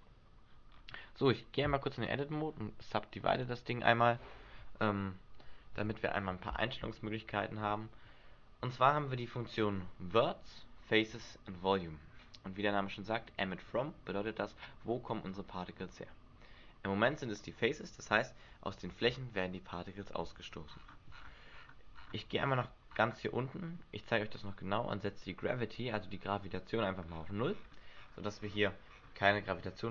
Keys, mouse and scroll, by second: 0.6-1.8 scroll up 4, 1.8 Tab, 3.3 click, 5.8 Tab, 18.8 alt+a, 20.2 Escape, 20.7-21.1 scroll down 5, 21.5-24.5 scroll down 18, 25.0 click, 27.0-29.9 scroll up 19.